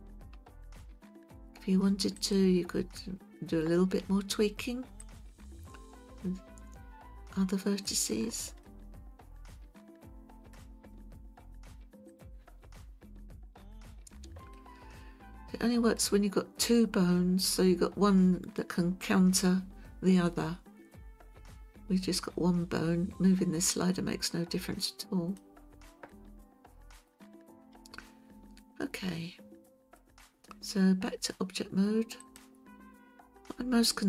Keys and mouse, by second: 2.2 click, 5.1-7.9 drag, 8.6-10.5 middle drag, 12.1 click, 14.5-16.0 middle drag, 23.8-25.4 drag, 26.1-27.1 middle drag, 28.6-30.0 middle drag, 32.2-34.0 drag.